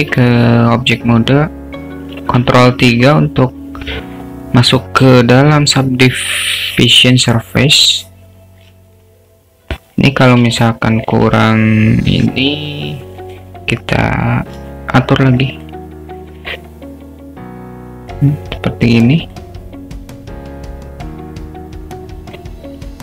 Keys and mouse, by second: 0.0 Tab, 2.5 ctrl+3, 10.7-11.2 alt+shift+middle drag, 12.1 Tab, 14.6 2, 15.4 click, 15.6 click, 16.6-18.2 drag, 19.3 click, 20.3-22.4 drag.